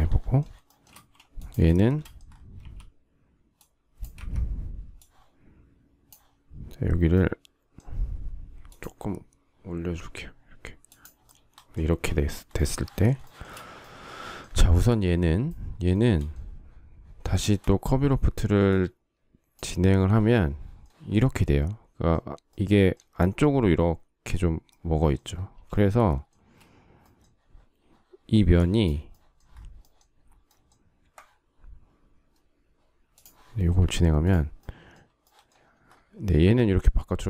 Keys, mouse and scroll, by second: 0.3 shift+middle click, 0.6 space, 1.4 shift+middle click, 2.2 q, 3.8 Escape, 11.6 space, 12.9 shift+middle click, 15.7 shift+middle click, 25.3 shift+middle click, 26.0 space, 37.1 shift+middle click.